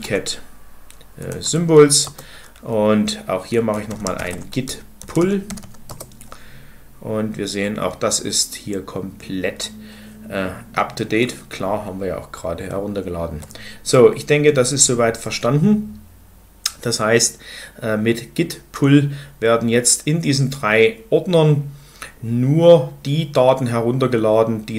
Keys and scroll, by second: 0.0-1.6 typing, 1.9 Return, 3.6-5.7 typing, 5.7 Return.